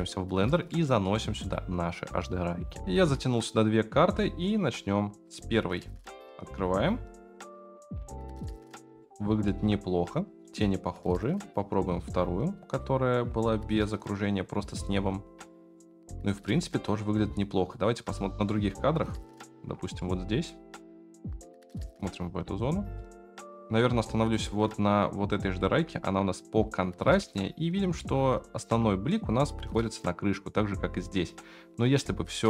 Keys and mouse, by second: 0.8 middle click, 1.5 click, 2.8 F9, 4.1-5.2 drag, 9.0-9.5 shift+middle drag, 11.4-12.8 drag, 15.5 shift+middle click, 18.3-19.2 middle drag, 20.0-20.4 shift+middle drag, 22.9 drag, 23.6 ctrl+z, 25.2 click, 27.2-28.0 shift+middle drag, 31.8 click, 32.3 ctrl+x.